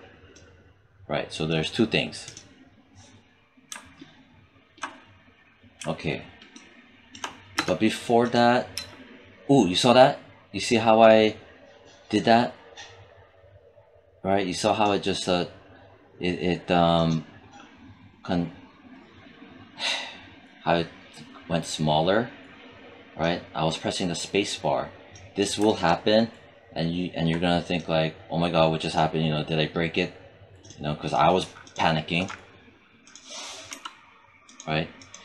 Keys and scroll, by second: 8.5 space, 33.6 BackSpace.